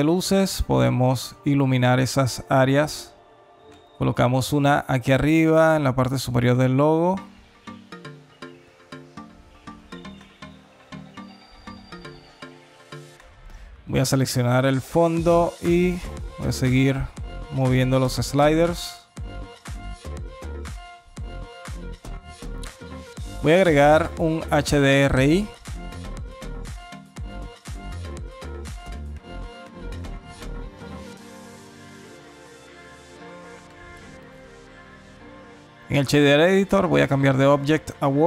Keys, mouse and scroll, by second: 0.9 KP_1, 2.8 shift+d, 9.1 g, 14.6 click, 16.1 click, 24.2 click, 26.6 click, 28.7 click, 36.2 click.